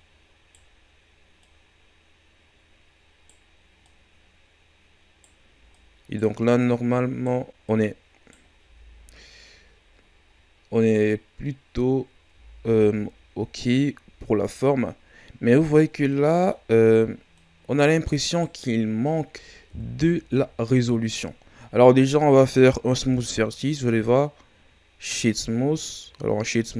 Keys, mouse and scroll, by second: 1.4 right click, 3.8 right click, 5.7 right click, 6.6 right click, 7.6 right click, 8.6 Tab, 8.9 scroll down 2, 9.7-11.3 scroll down 2, 11.3-12.3 scroll up 3, 12.3 Tab, 14.0-15.0 shift+scroll up 1, 15.4 right click, 15.9 scroll down 2, 16.1-17.3 middle drag, 17.3 click, 18.3 right click, 19.0 click, 19.6 KP_1, 20.7-21.6 scroll up 3, 21.6 scroll down 2, 22.2-23.0 shift+scroll up 2, 23.0 w, 25.9-26.7 scroll up 4.